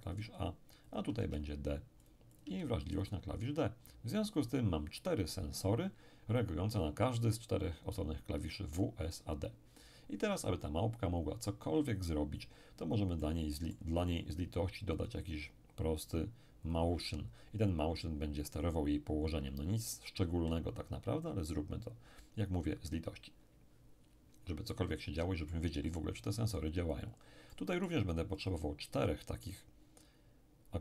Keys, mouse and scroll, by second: 1.2 d, 2.0-4.0 drag, 2.5 d, 4.4 click, 13.2-14.7 middle drag, 14.9 click, 16.7 click, 24.7-26.5 middle drag, 27.5-29.4 middle drag, 28.4 click.